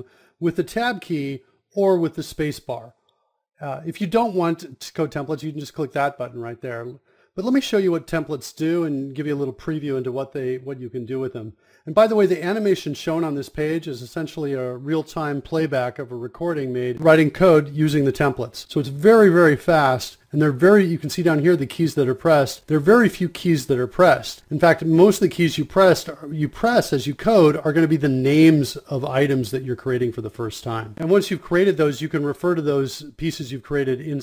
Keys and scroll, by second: 0.0-0.7 typing, 2.0-7.1 typing, 7.8 Down, 8.1 Return, 8.3 r, 8.6 space, 9.3 Return, 12.0-14.0 typing, 14.1 Insert, 14.4 Return, 15.3-25.2 typing, 23.1 Return, 26.2 Down, 26.5 Down, 26.6 Down, 26.8 Down, 26.9 Down, 27.4 Up, 27.5 Return, 28.8-31.6 typing, 32.6-33.9 typing, 33.9 Return.